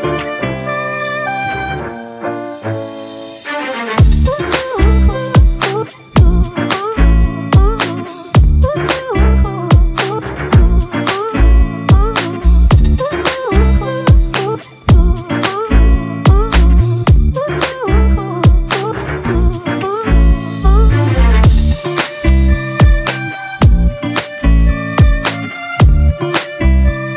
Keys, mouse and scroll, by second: 2.8-3.8 typing, 7.1-7.6 typing, 7.9 ctrl+-, 9.2-10.4 typing, 11.8 typing, 13.5 typing, 20.7 typing.